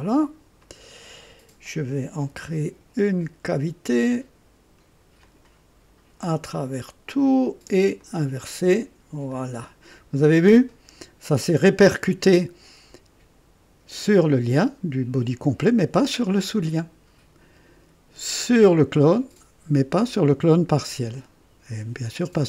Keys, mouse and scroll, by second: 0.6 click, 2.2 &, 5.2 click, 6.5 click, 7.1 click, 8.0 click, 9.2 click.